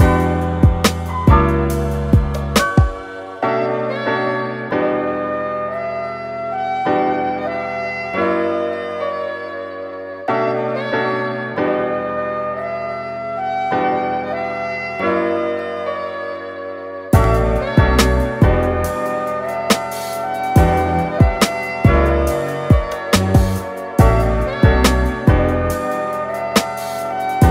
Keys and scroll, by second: 3.0 f, 7.9-8.7 typing, 9.8-10.8 typing, 15.3 Return, 17.1 super+t, 18.5-20.6 typing, 22.6 Return.